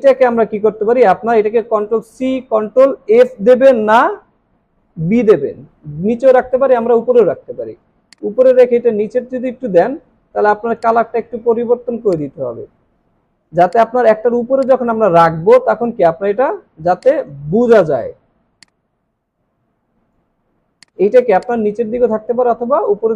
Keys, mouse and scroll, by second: 2.2 ctrl+c, 2.4 typing, 6.7 ctrl+b, 15.1-16.4 alt+scroll down 1, 17.7 alt+scroll up 3, 20.6 alt+scroll down 1, 20.8 space.